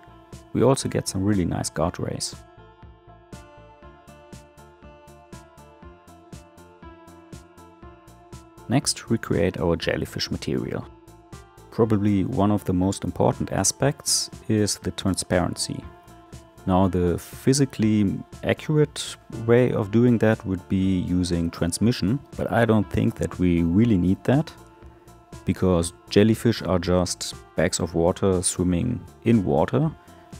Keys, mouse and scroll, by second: 4.7-5.8 middle drag, 5.8-7.3 drag, 7.3-8.9 middle drag, 10.0 click, 12.1-15.8 drag, 15.8 l.